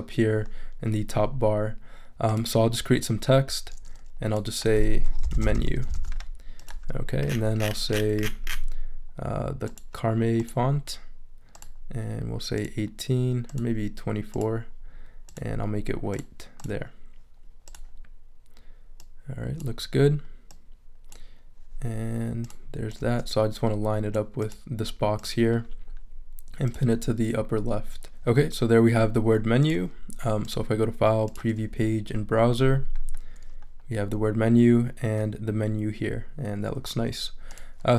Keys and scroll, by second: 5.0-6.0 typing, 6.9 super+a.